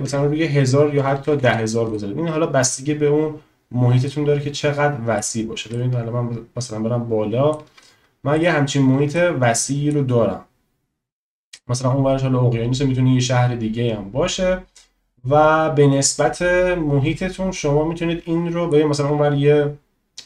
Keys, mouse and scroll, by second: 1.1 0, 1.2 0, 4.2 click, 5.8 shift+click, 8.4 shift+click, 9.2 shift+click, 11.6 middle click.